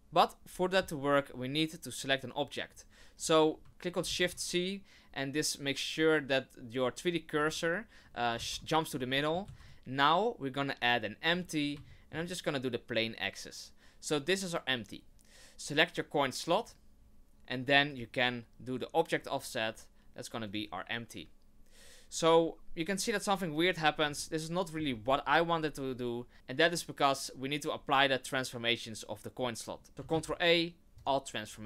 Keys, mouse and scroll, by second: 3.2-3.5 scroll down 1, 4.0 shift+c, 7.4 click, 8.3 shift+c, 9.1 shift+middle click, 9.3 shift+middle click, 9.4 shift+a, 11.9 shift+middle click, 16.6 right click, 17.9 click, 22.8 right click, 24.1 shift+middle click, 24.8 scroll up 1, 26.3 ctrl+a, 29.9 ctrl+a, 30.1 ctrl+a.